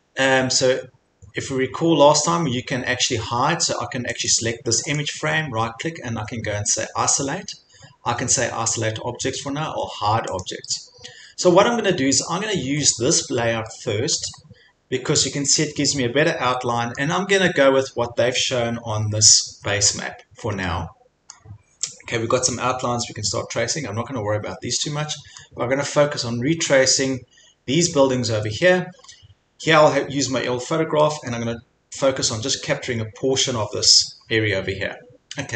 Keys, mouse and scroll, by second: 0.2 scroll, 1.1-1.7 scroll, 4.3 click, 4.9 right click, 10.4 click, 10.9 middle click, 11.1 scroll, 11.8 scroll, 12.8 scroll, 14.2-14.7 scroll, 17.2 scroll, 19.0 scroll, 19.7 scroll, 21.3 scroll, 25.4 scroll, 26.5 scroll, 28.1-28.5 scroll, 28.9 scroll, 30.5 scroll, 31.3-31.7 scroll, 34.3 scroll.